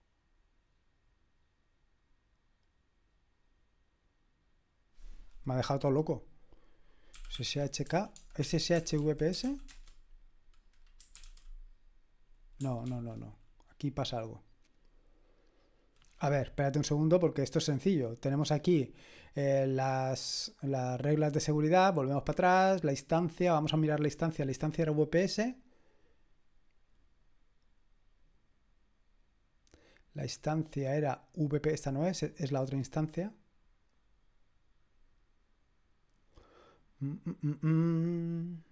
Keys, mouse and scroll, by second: 6.9-11.7 typing, 12.8 ctrl+c, 17.3 click, 20.3 click, 21.8 click, 29.9-30.5 scroll down 2, 30.5-31.9 scroll up 1, 31.9 click.